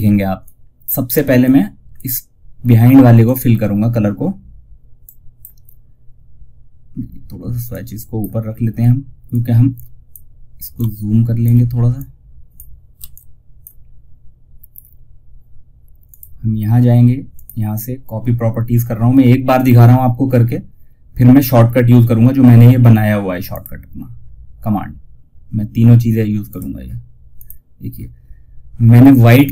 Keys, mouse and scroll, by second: 2.5 click, 3.0-3.6 scroll down 1, 4.3-6.2 drag, 4.9 typing, 6.2 scroll down 1, 7.0-12.3 drag, 12.3 F2, 12.4-15.2 drag, 15.4 click, 22.8 click, 25.8 click.